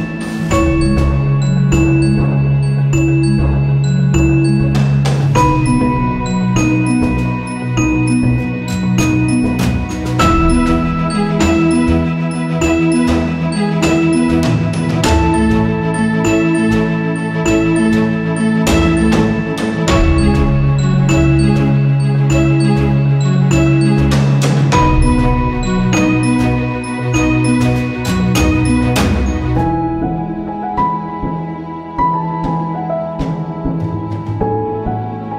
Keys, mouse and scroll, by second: 3.0-7.9 shift+drag, 7.9 ctrl+z, 8.4 click, 9.6-17.2 shift+drag, 17.2 ctrl+z, 18.0-21.7 shift+drag, 21.7-26.1 shift+drag, 26.1-28.3 shift+drag, 31.1 shift+click.